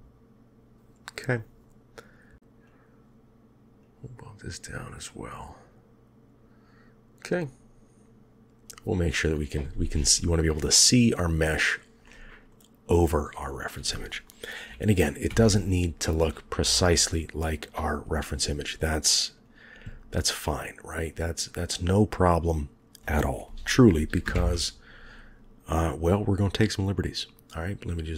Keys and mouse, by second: 3.8-6.5 drag, 11.9-12.4 middle drag, 14.5 KP_3, 15.2 KP_1, 16.5 KP_7, 20.4-22.3 drag, 24.2 ctrl+KP_1, 25.9 click, 27.0-28.1 drag.